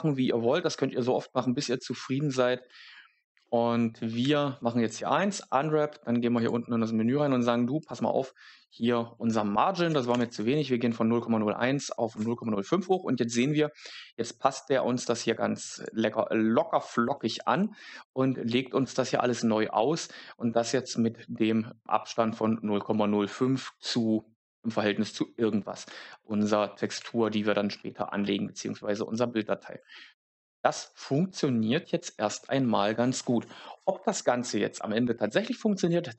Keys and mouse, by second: 6.3 click, 7.8-12.1 drag, 15.7 click, 17.1 shift+s, 29.8 shift+middle click.